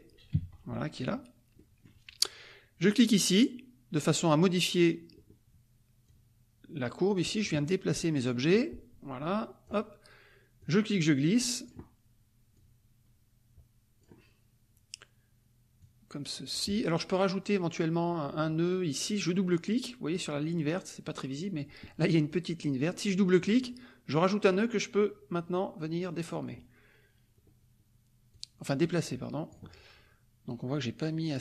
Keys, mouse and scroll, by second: 0.0-0.1 typing, 1.0 click, 1.6 middle click, 4.6 click, 6.0-7.6 drag, 8.4-9.8 drag, 10.6-11.8 drag, 12.5-14.2 drag, 15.8 click, 23.4 click, 24.4-26.6 drag, 28.3-29.7 drag.